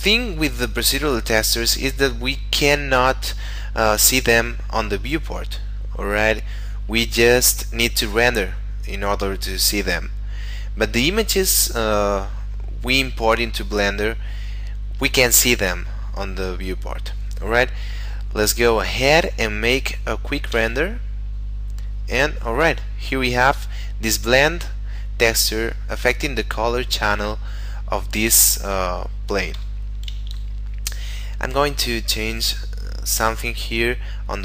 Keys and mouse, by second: 0.0 middle click, 20.5 F12, 29.6 Escape, 32.2 click.